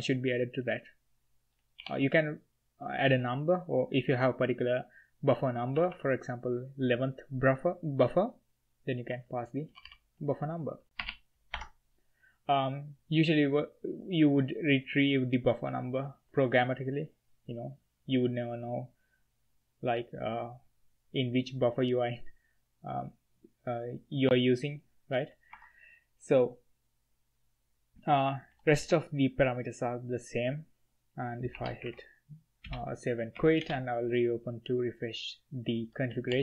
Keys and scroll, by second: 1.8 h, 1.9 h, 3.1 s, 5.7 1, 5.9 1, 9.7 ctrl+h, 9.8 ctrl+h, 11.0 0, 11.7 Escape, 25.5 Escape, 28.5 i, 28.6 i, 28.8 i, 31.5-32.0 typing, 32.6 Return, 33.3 Up, 33.6 Return, 35.7-36.4 typing.